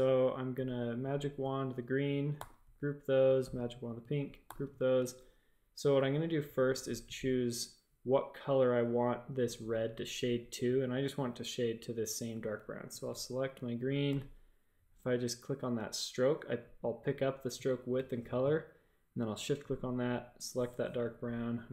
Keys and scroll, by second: 0.5 y, 2.3 super+g, 4.4 super+g, 5.0 shift+super+a, 12.3 a, 14.0 i.